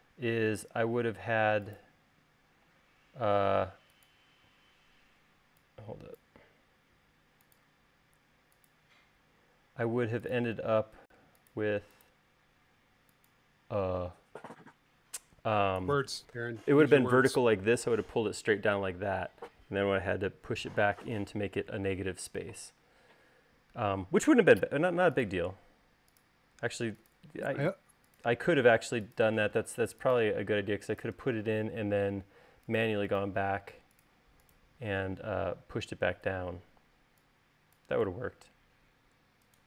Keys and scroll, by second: 5.2 e, 7.4 l, 14.6 space, 25.2 l, 28.2 l, 30.2 space, 36.0 e.